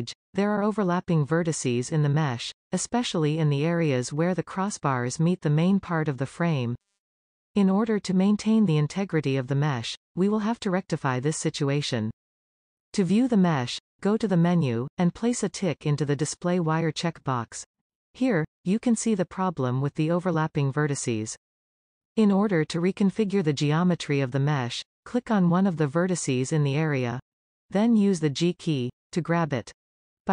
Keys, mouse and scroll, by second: 16.1 click, 17.5-19.3 middle drag, 19.6-20.1 scroll down 2, 20.1-21.8 middle drag, 21.8-22.3 scroll down 1, 22.3-24.2 middle drag, 25.6 click, 27.2-30.3 middle drag.